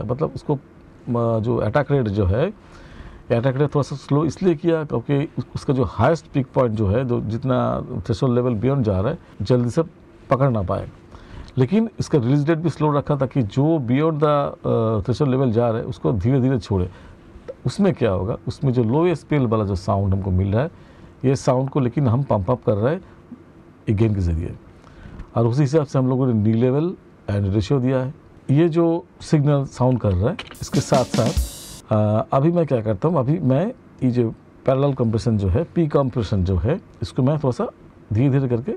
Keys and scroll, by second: 30.0 space.